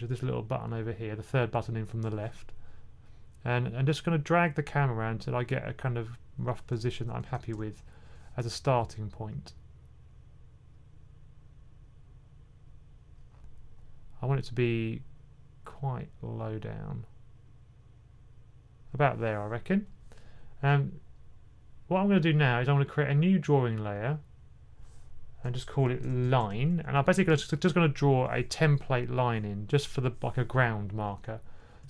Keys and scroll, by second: 6.9-7.4 typing, 25.8-27.2 typing.